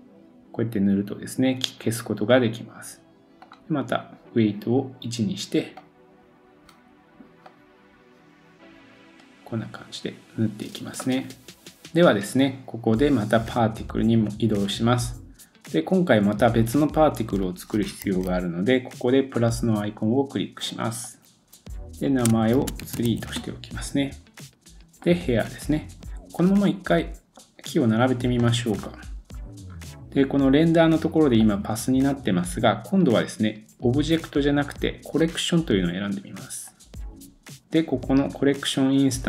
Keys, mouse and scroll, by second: 11.6 middle click, 11.6 scroll up 1, 13.6-19.3 middle drag, 18.0 super+s, 19.3-20.9 drag, 20.9 middle click, 21.0-25.2 drag, 23.0 e, 25.2-31.4 middle drag, 26.1 scroll down 2, 27.5-27.9 scroll up 3, 27.9 scroll down 2, 29.3 scroll down 2, 30.3-30.7 scroll down 4, 31.4-39.2 drag, 38.3-39.2 scroll down 1.